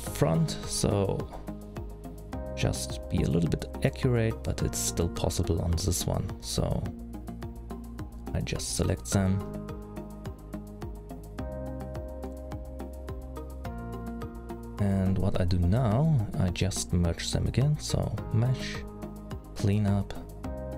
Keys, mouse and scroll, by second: 0.9 c, 3.1 middle click, 5.4 c, 9.5 middle click, 10.7 c, 15.6 middle click, 16.5-18.1 scroll down 3, 18.1 click, 18.1-18.7 scroll down 2.